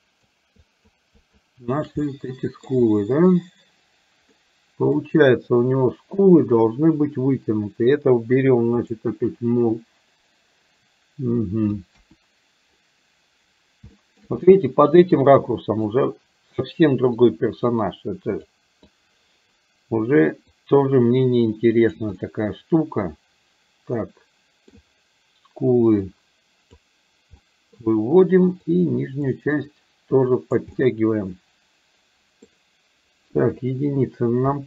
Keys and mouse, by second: 0.0 shift+click, 0.6 shift+click, 1.2 shift+click, 2.1 middle click, 4.4 middle click, 8.9 click, 12.0 KP_1, 14.0 middle click, 14.4 middle click, 15.5 middle click, 17.2-18.5 drag, 19.0 click, 20.5-22.1 drag, 22.2-24.7 middle drag, 26.1 click, 27.4 middle click, 28.6 click, 29.7 click, 30.7-32.6 middle drag, 33.6 KP_1.